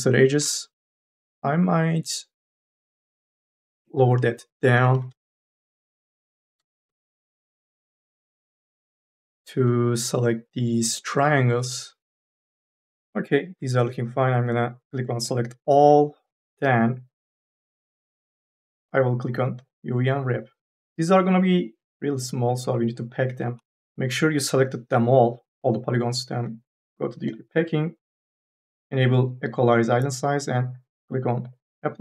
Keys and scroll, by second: 4.6 KP_1, 4.9 Return, 6.5 KP_1, 6.9 Return, 23.6 3.